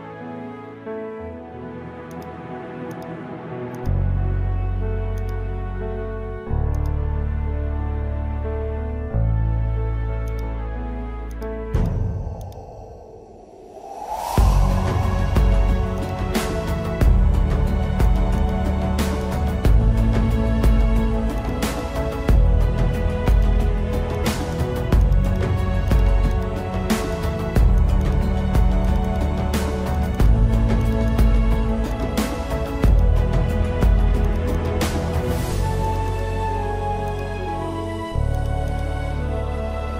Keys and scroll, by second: 2.0 space, 4.2 space, 5.2 ctrl+alt+z, 5.7 space, 6.5 space, 7.4 ctrl+alt+z, 8.1 space, 8.8 space, 10.6 space, 11.3 space, 11.7 space, 12.6 space, 13.4 ctrl+alt+z, 14.3 space, 15.3 space, 15.7 ctrl+alt+z, 16.3 space, 17.0 ctrl+alt+z, 18.1 space, 19.7 space, 20.3 ctrl+alt+z, 20.7 ctrl+alt+z, 21.5 space, 22.9 ctrl+alt+z, 24.1-28.5 typing, 25.7 ctrl+alt+z, 30.3 space, 30.9 space, 31.5 space, 32.5 space, 33.5 space, 34.6-37.1 typing, 38.2 space.